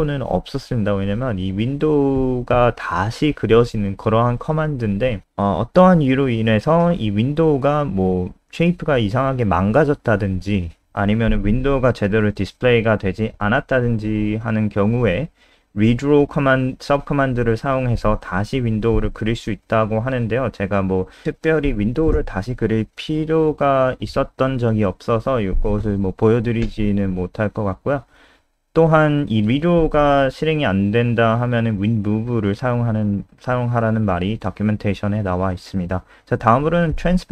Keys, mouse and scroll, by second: 0.1-1.1 scroll down 1, 3.4 click, 7.6 F3, 9.0 click, 31.0-31.6 scroll down 2, 33.2 ctrl+c, 33.3 click, 33.9 shift+Home, 34.2 shift+Up, 34.3 shift+Up, 34.9 shift+Down, 35.4 ctrl+v, 35.6 ctrl+s, 37.1 click.